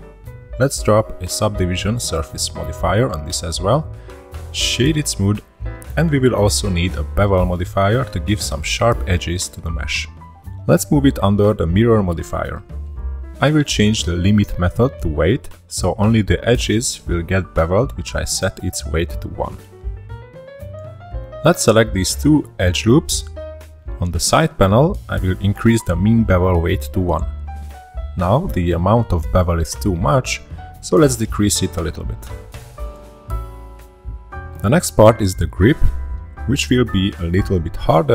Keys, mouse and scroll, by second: 0.3 middle click, 0.8 ctrl+3, 1.4-2.8 middle drag, 2.8 click, 4.4-5.6 drag, 5.6-6.0 middle drag, 6.0-7.7 right drag, 8.8-9.5 drag, 9.5-10.3 scroll down 3, 10.3 scroll down 1, 10.4-11.3 drag, 11.6-12.3 scroll up 2, 13.3-14.0 scroll down 4, 16.4-18.7 drag, 18.8-19.8 shift+middle drag, 19.8 alt+shift+click, 20.2-20.8 shift+middle drag, 20.8 shift+click, 21.2-22.2 shift+middle drag, 22.8-24.3 shift+middle drag, 24.7-25.2 scroll up 1, 25.2-26.5 shift+middle drag, 26.5 n, 28.2 click, 29.5-33.3 drag, 35.3-35.6 scroll up 1, 35.6-38.1 middle drag.